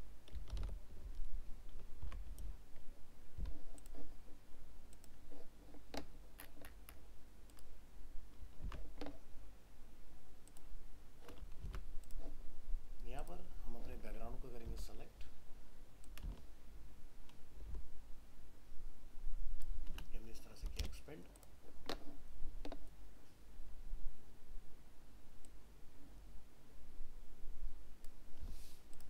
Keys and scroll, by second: 0.5 alt+i, 2.0 ctrl+d, 8.6 ctrl+a, 11.6 ctrl+d, 14.6 ctrl+t.